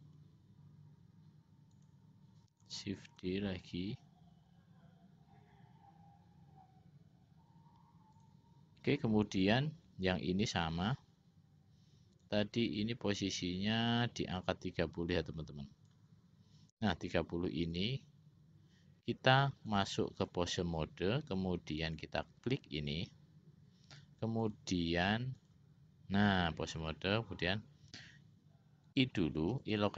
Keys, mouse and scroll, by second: 3.5 shift+d, 12.7-16.4 drag, 17.8 click, 19.9 click, 22.1-23.3 drag, 24.6-26.0 drag, 29.0 i.